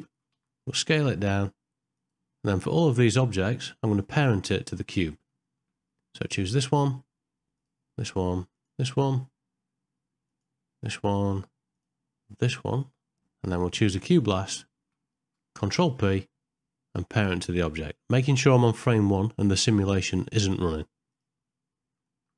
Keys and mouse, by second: 2.7 middle click, 4.8 ctrl+middle click, 5.4 shift+middle click, 6.2 click, 8.5 shift+click, 11.8 shift+click, 13.0 middle click, 16.3 ctrl+p, 22.1 ctrl+middle click.